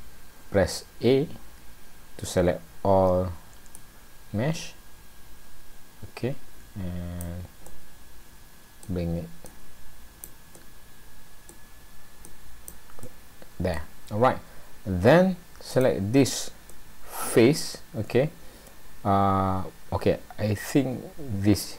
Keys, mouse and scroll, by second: 0.0 a, 3.7 click, 7.7 middle click, 9.5 click, 10.5 middle click, 12.2 click, 13.0 middle click, 15.7 click, 16.7 middle click.